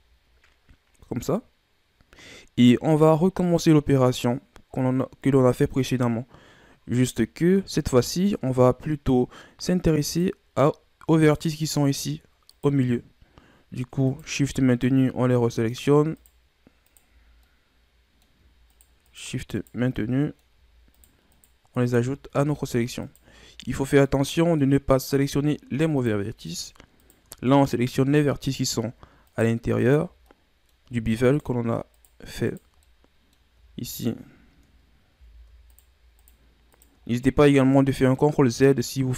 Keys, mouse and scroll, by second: 10.1 right click, 11.2 right click, 12.5 right click, 14.1 shift+right click, 14.7 shift+right click, 15.7 shift+right click, 16.1 shift+right click, 16.9 shift+right click, 17.4-18.7 middle drag, 18.7 shift+right click, 19.0 shift+right click, 19.5 shift+right click, 19.9-20.9 middle drag, 20.9 shift+right click, 21.3 shift+right click, 22.4 ctrl+z, 23.0 shift+right click, 23.6 shift+right click, 24.0 middle click, 24.9-26.0 scroll up 1, 26.0 shift+right click, 26.5 shift+right click, 27.0 shift+right click, 27.5-28.5 middle drag, 28.5 shift+right click, 29.2 shift+right click, 29.8 shift+right click, 30.2-31.2 middle drag, 31.2 shift+right click, 31.9 shift+right click, 32.4 shift+right click, 32.8-33.9 middle drag, 33.9 shift+right click, 35.1 ctrl+z, 35.7 shift+right click, 36.2 shift+right click, 36.7 shift+right click, 37.1-39.1 middle drag.